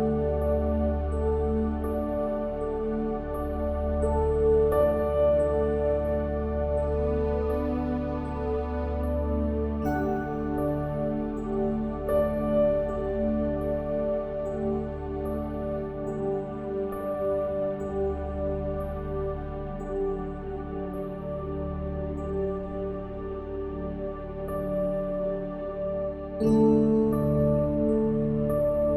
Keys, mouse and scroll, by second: 0.0-5.6 typing, 2.2 middle click, 6.7-14.4 typing, 15.7-19.9 typing, 20.9 middle click, 22.4 ctrl+KP_Add, 22.9 s, 24.0 click, 24.4 e, 25.2 e, 26.6 click, 27.3 e, 27.8 s.